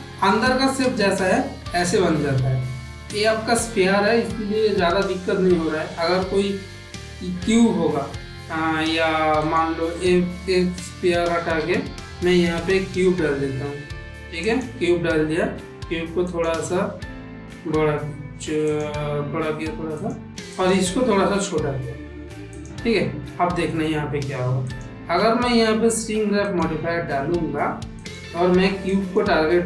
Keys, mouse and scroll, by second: 0.2 middle click, 1.0 shift+middle drag, 11.5 Delete, 12.7 shift+a, 15.4 s, 17.4 g, 19.4 s, 20.5 click, 21.2 s, 24.6-26.5 drag, 28.0-29.1 drag.